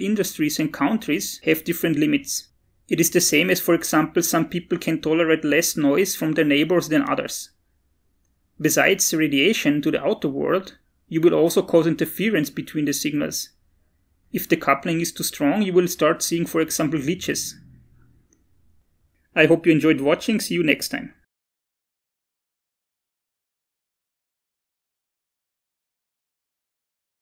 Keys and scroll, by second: 18.9 Return.